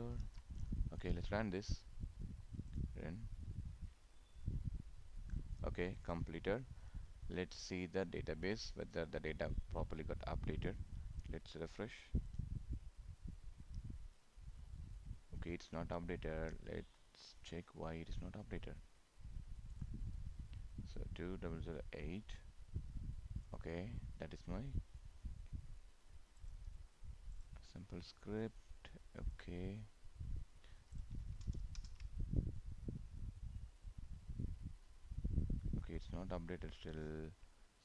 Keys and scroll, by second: 0.3 ctrl+s, 31.8 ctrl+Return.